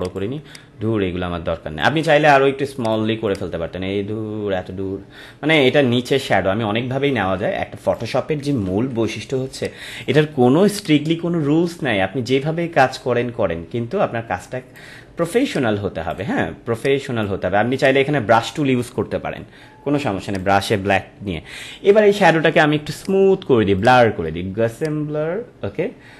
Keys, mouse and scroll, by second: 0.0-2.0 drag, 2.0 right click, 2.7-8.7 drag, 8.7 ctrl+=, 9.4 space, 9.5 click, 9.9 space, 10.7-20.2 drag, 23.0 click.